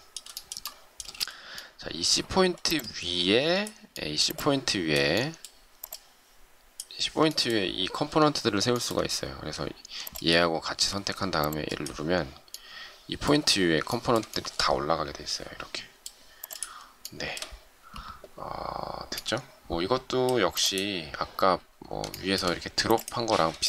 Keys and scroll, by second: 1.0 shift+space.